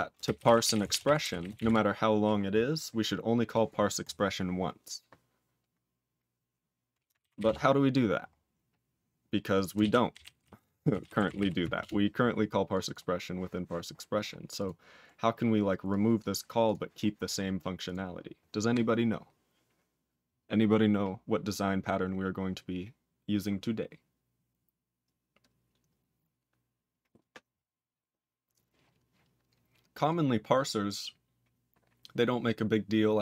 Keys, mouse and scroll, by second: 0.0-2.5 typing, 2.6-3.5 scroll down 3, 3.5 click, 3.6 click, 4.0 click, 7.4 Return, 8.3-9.1 scroll down 8, 9.1-9.8 scroll down 5, 9.8 ctrl+s, 9.8-11.8 typing, 12.7 click, 12.8 double click, 12.9 double click, 13.1-13.8 scroll up 5, 13.9-14.5 scroll down 8, 14.5 click, 15.0-15.7 scroll down 3, 15.8 click, 16.1 click, 16.6 click, 17.8 click, 30.1-31.4 scroll down 2.